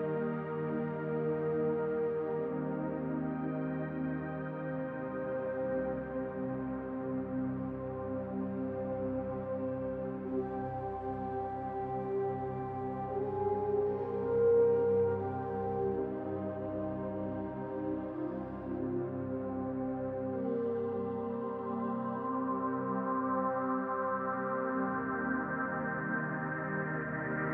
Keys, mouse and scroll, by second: 2.3 click, 5.6 shift+middle click, 7.6 click, 10.3 click, 12.8 middle click, 14.3 middle click, 15.8-17.3 scroll down 5, 23.7 scroll down 1, 24.7 click, 24.7-25.9 scroll up 1, 25.9-26.7 scroll down 1, 27.4-27.5 scroll down 2.